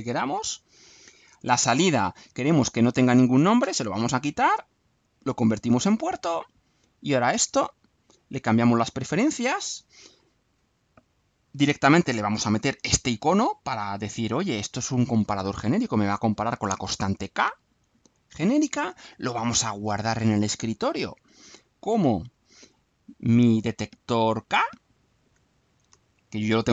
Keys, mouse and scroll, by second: 0.8 click, 1.7 click, 2.9 click, 3.6 BackSpace, 4.7 click, 5.5 click, 8.3 click, 9.7 click, 11.5 click, 12.7 alt+click, 13.8 click, 18.3 click, 20.8 click, 22.2 click, 24.3 click, 25.3-26.5 drag.